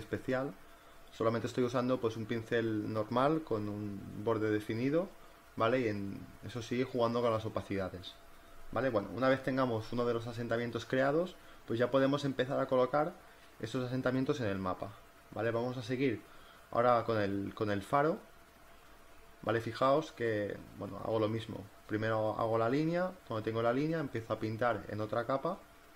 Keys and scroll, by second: 0.1 e, 4.7 ctrl+t, 10.6 Return, 11.1 z, 11.6 space, 14.3 space, 16.3 space, 20.9 ctrl+z, 22.0 ctrl+z, 22.5 ctrl+z, 22.7 ctrl+z, 23.6 b, 23.8 ctrl+alt+z, 24.5 e, 24.8 ], 25.6 b.